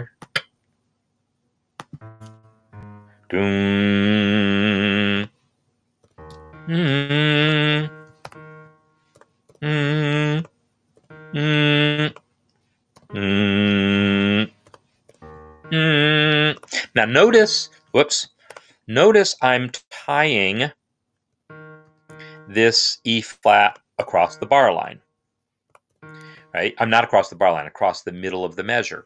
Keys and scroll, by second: 2.3 Down, 4.5 Right, 4.9 5, 5.8 e, 6.1 ctrl+Up, 7.0-10.7 typing, 11.8-18.4 typing, 21.1 e, 21.7 shift+=, 23.3-23.7 typing, 25.4 typing, 26.1 Escape.